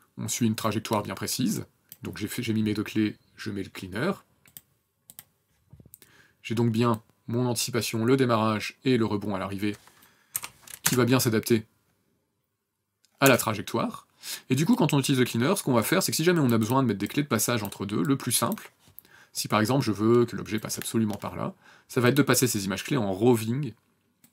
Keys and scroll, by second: 10.4 n, 10.9 KP_0, 13.3 KP_0.